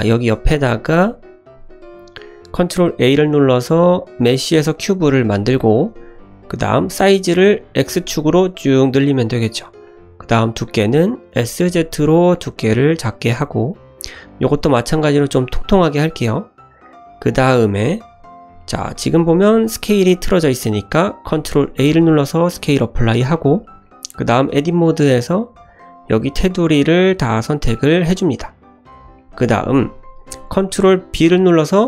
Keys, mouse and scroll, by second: 0.7 `, 1.2 shift+middle drag, 1.8 shift+right click, 2.5 shift+a, 5.3 shift+middle drag, 6.2-7.3 scroll up 1, 7.3 s, 9.8-10.4 middle drag, 11.3 s, 14.4 shift+middle click, 14.9-15.4 scroll up 1, 15.4-17.1 middle drag, 17.5 scroll up 1, 19.3 click, 19.5 click, 21.2 ctrl+a, 23.3 shift+middle click, 23.8 middle click, 24.5 Tab, 25.5 2, 25.6 click, 26.0 click, 26.7 shift+click, 27.4 shift+click, 27.7 middle click, 28.7 shift+click, 29.1 shift+middle click, 29.5 middle click, 31.1 ctrl+b.